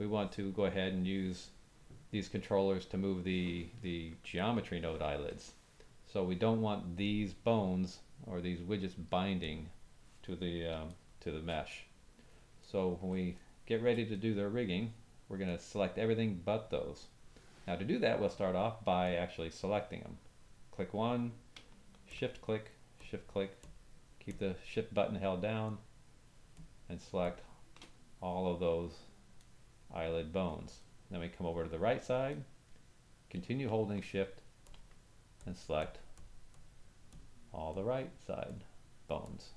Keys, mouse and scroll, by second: 9.4 click, 10.9 shift+middle click, 11.8 middle click, 12.6 ctrl+middle click, 13.9 shift+middle click, 14.2 middle click, 15.5-19.1 middle drag, 19.0 click, 22.1 shift+click, 22.9 shift+click, 23.6 shift+click, 24.3 shift+click, 25.6-26.5 shift+drag, 26.6-26.9 shift+drag, 27.2 shift+click, 29.4-30.1 drag, 29.4 middle click, 30.8 middle click, 31.2-32.0 drag, 32.3-33.3 drag, 32.4 middle click, 34.6 shift+click, 35.4 shift+click, 35.8 shift+click, 36.1-36.6 shift+drag, 37.1 shift+click, 37.7 shift+click, 38.4 shift+click, 39.2 shift+click.